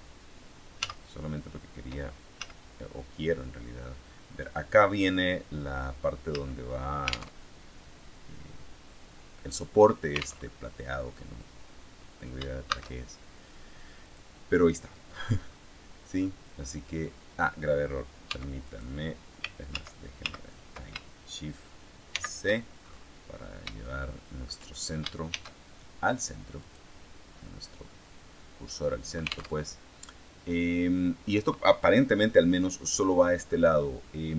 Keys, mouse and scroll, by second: 0.7 z, 2.3 z, 6.2 z, 7.3 alt+Tab, 10.4 alt+Tab, 12.6 shift+a, 14.0 click, 15.0-16.9 scroll down 1, 18.2 x, 18.6 click, 19.6 ctrl+z, 22.0 shift+c, 23.3-23.8 scroll up 3, 23.8 shift+middle click, 25.2 shift+a, 26.5 click, 27.2-27.8 scroll down 2, 29.5 alt+Tab.